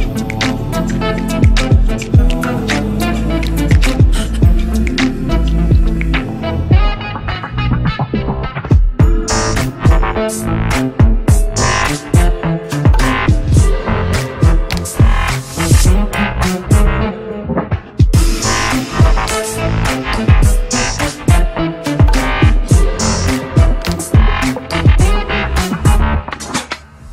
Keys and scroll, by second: 11.1 F3, 20.0 Delete.